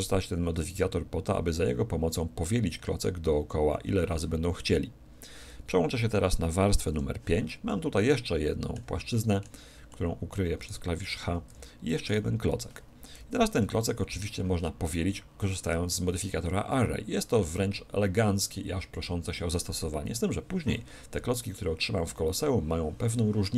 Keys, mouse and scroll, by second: 6.9 5, 7.7-11.8 middle drag, 10.6-13.8 right drag, 11.5 h, 13.2 KP_1, 13.5 KP_7, 14.6-18.2 middle drag, 14.6-15.8 scroll up 1.